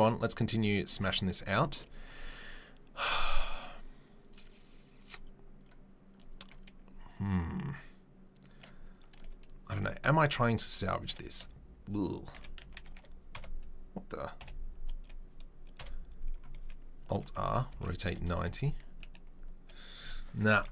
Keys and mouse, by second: 2.0 click, 6.1-8.6 drag, 8.6-20.7 middle drag, 10.1 r, 12.3 r, 14.4 KP_7, 15.8 KP_Decimal, 17.2 alt+r, 20.5 Delete.